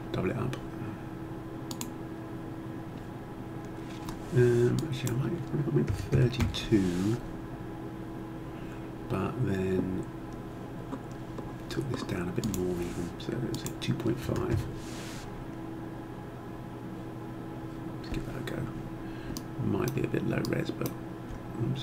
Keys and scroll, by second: 5.8 3, 6.1 2, 6.4 Return, 14.2 5, 14.5 Return.